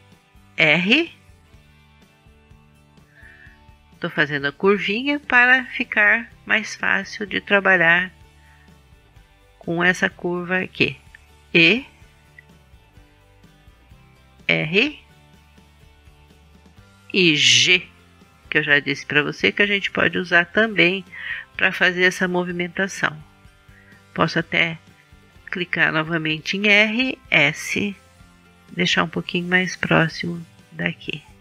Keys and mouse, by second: 0.4 ctrl+z, 1.7 r, 6.1-7.5 drag, 7.5 s, 11.8 e, 14.8 r, 17.7 g, 24.1 r, 26.6-28.6 drag, 27.3 s, 30.0-31.4 drag.